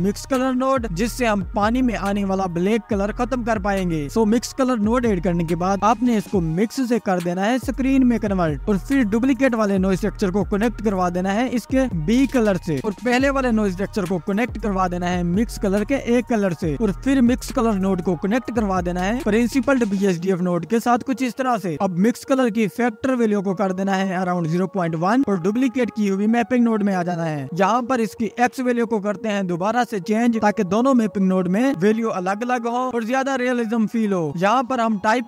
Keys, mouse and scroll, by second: 4.5-5.2 scroll up 4, 6.0 middle click, 6.2-9.2 drag, 10.7-11.9 drag, 12.4 scroll down 1, 12.4 middle click, 13.3-14.4 scroll down 3, 14.4 middle click, 14.9 click, 17.5 middle click, 18.4-19.0 scroll up 1, 19.0-20.5 drag, 23.4 click, 24.7-27.6 drag, 30.1-30.7 scroll up 8, 31.5-32.7 middle drag, 32.7-35.2 drag.